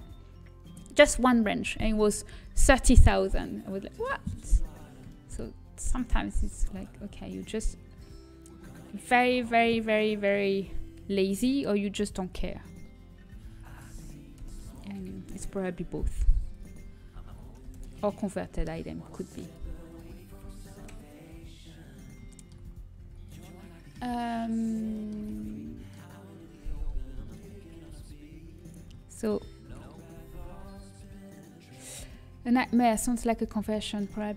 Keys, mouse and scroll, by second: 5.0-6.4 middle drag, 6.4 z, 6.8-8.8 drag, 19.1 g, 19.5-21.9 drag, 21.9 g, 22.6-25.0 middle drag, 23.0 z, 27.6-30.5 right drag, 28.4 g, 30.5 shift+d.